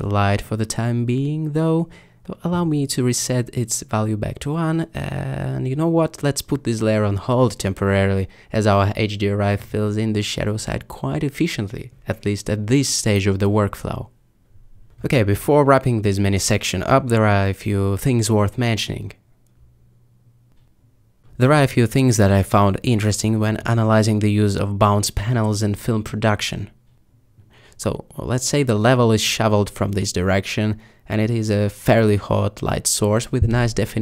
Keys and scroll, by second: 2.0 1.